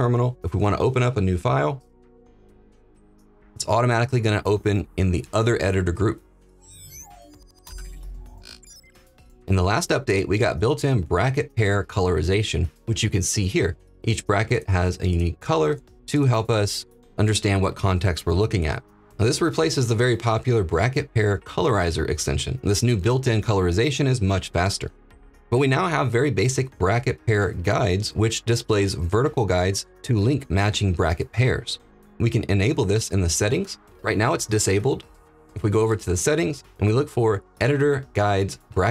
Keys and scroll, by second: 1.7 ctrl+p.